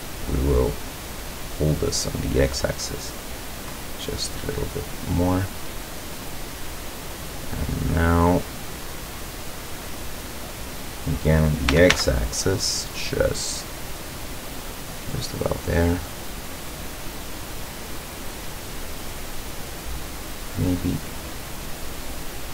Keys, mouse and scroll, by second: 2.5-4.3 drag, 4.5-9.2 middle drag, 9.7-10.8 middle drag, 11.0 middle click, 11.7 e, 12.0 x, 15.3 click, 15.7-20.7 middle drag, 21.4-22.5 drag.